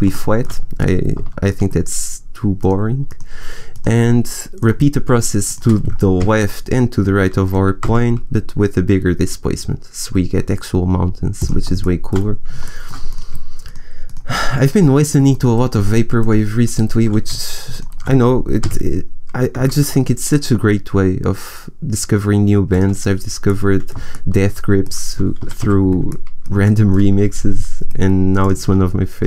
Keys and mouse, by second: 2.8-5.5 right drag, 5.5-7.8 drag, 6.1 g, 11.9 middle click, 12.8 click, 13.0-16.1 right drag, 18.5 g, 19.5-21.1 middle drag, 22.7-24.4 drag, 24.4 middle click, 25.3 a, 25.5 a.